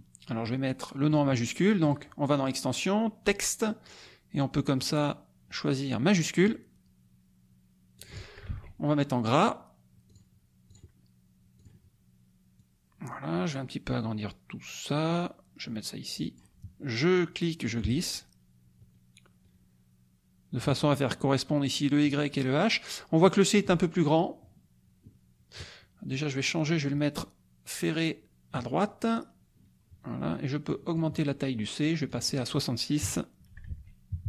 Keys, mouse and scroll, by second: 0.5 click, 1.8 click, 6.2 click, 7.9 click, 8.5 ctrl+a, 10.1 click, 10.7 click, 11.6 click, 12.6-16.5 drag, 17.8-20.8 ctrl+drag, 23.5 click, 26.1-28.7 drag, 30.7 click, 32.1 click, 33.0 KP_5, 33.7 ctrl+a, 34.1 ctrl+KP_6.